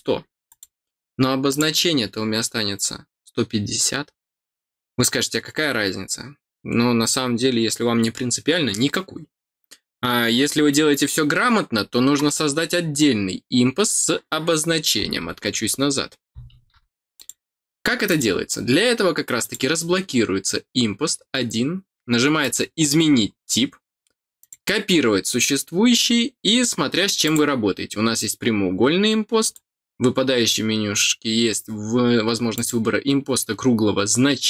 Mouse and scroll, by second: 0.4 click, 1.4 click, 17.1 click, 18.0 click, 19.4 click, 22.4 click, 24.4 click, 27.2 click, 29.4 click, 32.5 click.